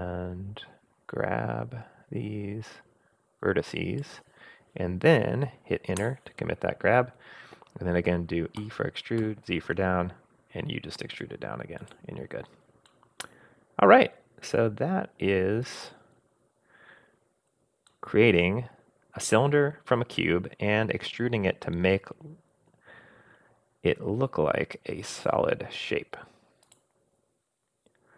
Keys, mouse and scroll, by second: 8.6 e, 12.9-14.0 middle drag, 15.6 click, 17.9-19.6 middle drag, 19.6-22.4 drag, 22.4 middle click, 23.0-23.9 scroll down 2, 23.9-24.3 scroll down 1, 26.6 click.